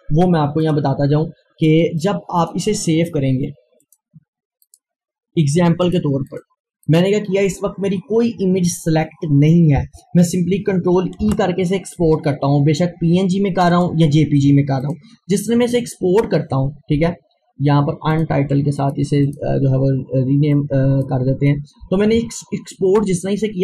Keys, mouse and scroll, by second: 0.7-3.8 drag, 11.1 click, 11.2 ctrl+e, 13.7 ctrl+e, 17.0 click, 18.1-23.5 drag.